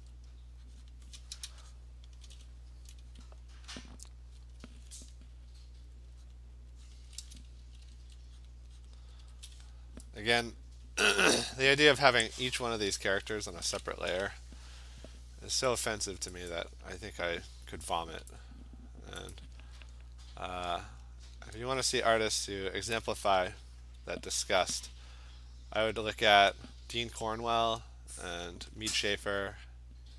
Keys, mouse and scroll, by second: 0.0 [, 0.9 click, 2.1 click, 4.5 alt+click, 5.1 click, 5.6 click, 5.7 alt+click, 6.0 click, 6.1 alt+click, 6.3 click, 7.0 click, 7.1 alt+click, 7.4 click, 7.6-9.2 typing, 8.5 click, 8.9 click, 10.9-11.4 alt+click, 11.3 alt+click, 13.1 click, 15.8 click, 16.5 click, 18.3 click, 19.3 click, 20.8 click, 21.8 click, 22.7 click, 25.9 alt+click, 26.8 alt+click, 28.0 click, 28.3 click, 28.6 click, 28.8 click, 29.5 alt+click.